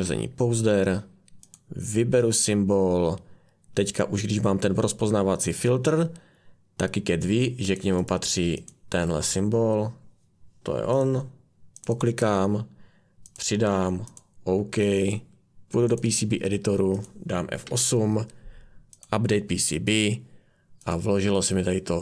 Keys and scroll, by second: 17.6 F8.